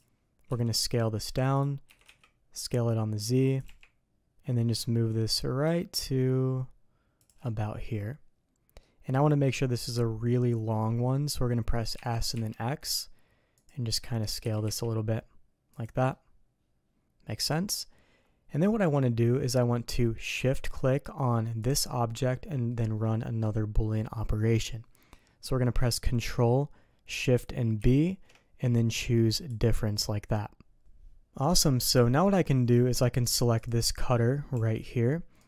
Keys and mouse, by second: 0.4 s, 1.8 s, 3.6 g, 7.5-8.7 drag, 11.9 s, 14.4 s, 16.0-17.6 middle drag, 18.5 middle click, 21.6 shift+click, 29.9-30.8 shift+middle drag, 31.3 middle click, 33.5 click, 34.5 g.